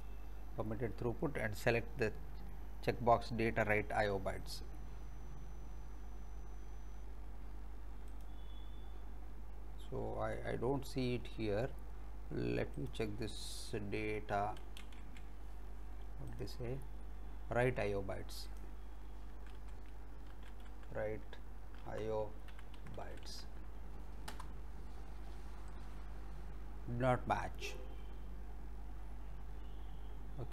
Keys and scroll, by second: 14.5-15.6 typing, 19.4 w, 19.9 r, 20.7 e, 22.2-23.0 typing, 26.0 Return.